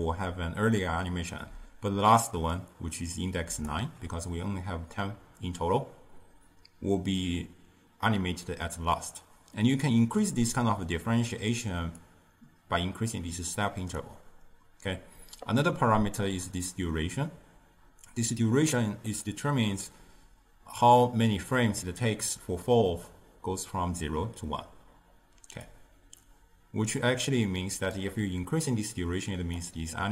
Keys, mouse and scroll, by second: 1.6-2.6 d, 2.6-3.7 drag, 3.7-4.1 d, 12.1-15.1 drag, 25.8-30.1 drag.